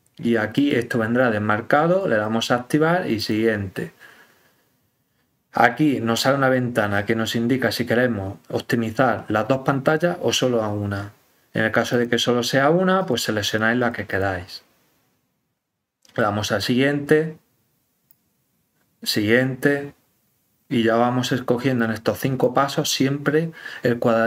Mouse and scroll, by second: 0.5 click, 2.0 click, 3.1 click, 6.5 click, 11.9 click, 12.9 click, 13.4 click, 13.7 click, 14.1 click, 16.2 click, 18.0-19.4 drag, 21.8 click.